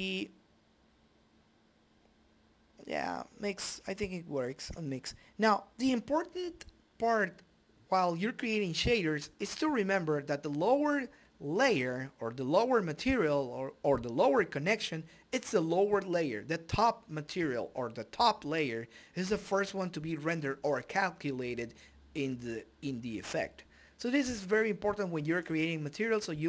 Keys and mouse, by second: 1.9 click, 4.5 click, 4.9 click, 12.8 click, 16.6-21.9 drag.